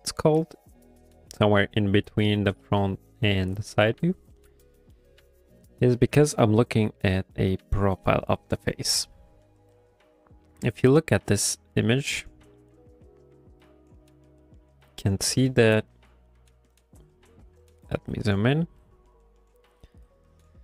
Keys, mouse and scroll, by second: 1.6 middle click, 2.6 middle click, 4.7 shift+middle click, 4.8 shift+middle click, 16.8 click.